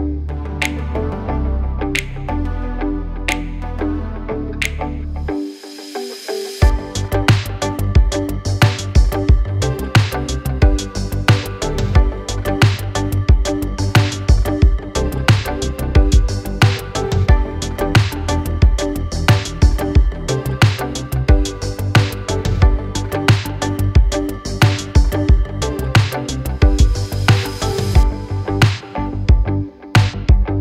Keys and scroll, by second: 3.9 m, 5.1 space, 7.0 m, 9.0 space, 15.1 l.